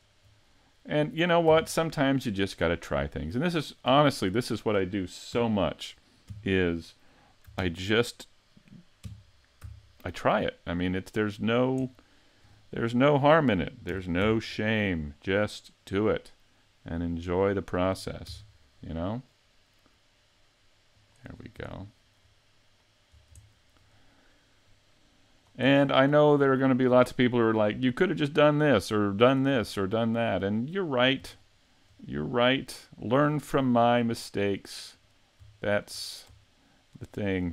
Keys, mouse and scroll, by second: 0.2 shift+right click, 0.5-0.9 scroll up 2, 0.9 middle click, 1.5 x, 3.6 right click, 5.4 KP_3, 6.3 KP_5, 7.6 ctrl+KP_3, 9.0 KP_5, 9.6 z, 10.5 shift+middle click, 11.8 shift+middle click, 13.9 shift+d, 17.3 click, 18.3 shift+d, 21.1 click, 21.4 scroll up 4, 21.7 shift+middle click, 22.8-23.4 scroll down 2, 23.1-23.6 scroll up 2, 23.4 shift+middle click, 24.6 click, 25.7 scroll down 4, 26.1 shift+middle click, 26.6 scroll up 5, 27.1 shift+middle click, 28.0 right click, 28.4-28.9 scroll down 2, 29.3 right click, 29.6-30.0 scroll down 2, 30.0 middle click, 31.1-31.4 scroll down 2, 31.5 shift+middle click, 33.3 scroll up 5, 33.7 shift+middle click, 35.0 right click, 35.7 shift+right click, 36.0-36.6 scroll down 3, 36.9 shift+right click.